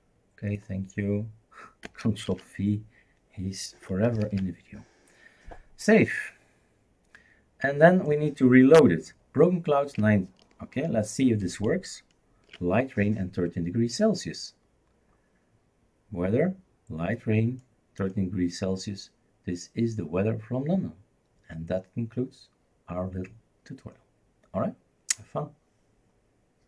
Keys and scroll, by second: 2.3 ctrl+v, 4.2 ctrl+s, 11.6 shift+super+r.